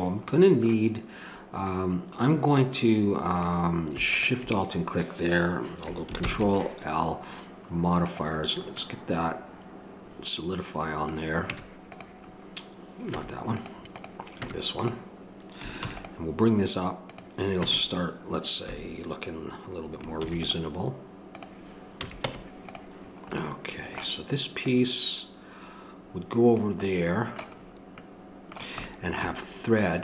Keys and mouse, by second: 3.4-6.0 drag, 6.2 ctrl+l, 11.5 Tab, 13.2 Tab, 13.9 click, 15.8 ctrl+r, 17.6 Tab, 20.2 ctrl+r, 22.0 a, 22.3 Tab, 23.7-26.6 drag, 29.8-30.0 middle drag.